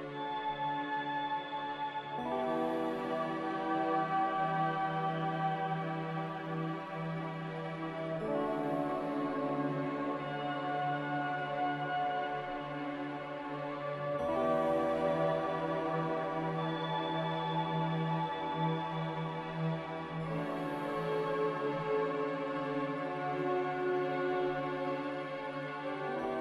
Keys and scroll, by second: 12.1 n.